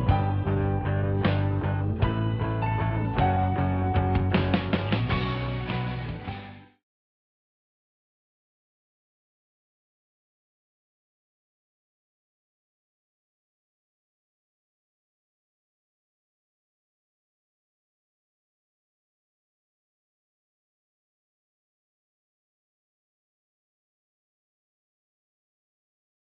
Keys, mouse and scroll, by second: 1.0 click, 4.1 scroll up 1, 4.8-10.0 middle drag, 11.1 click.